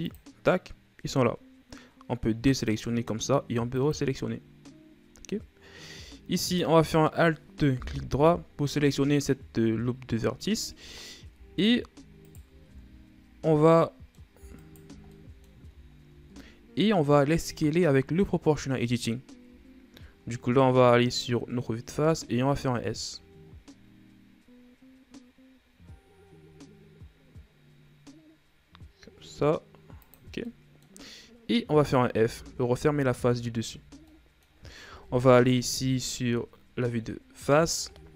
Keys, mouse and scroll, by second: 0.6-6.9 drag, 6.9 alt+right click, 8.3 KP_1, 10.4-11.8 scroll up 1, 11.8 i, 13.2 ctrl+z, 14.3 middle click, 15.1 alt+right click, 15.6 middle click, 16.4-18.0 scroll down 3, 18.0 o, 18.4-18.7 scroll down 2, 18.7-20.0 middle drag, 20.0 KP_1, 21.0 shift+scroll up 2, 21.7-22.4 scroll up 2, 22.4 s, 31.0 middle click, 31.5-32.7 scroll up 2, 32.7 f, 33.7 Tab, 34.3-34.6 scroll down 2, 34.6 middle click, 35.6 KP_1, 36.6-37.1 shift+scroll down 2, 37.1-38.1 scroll up 1.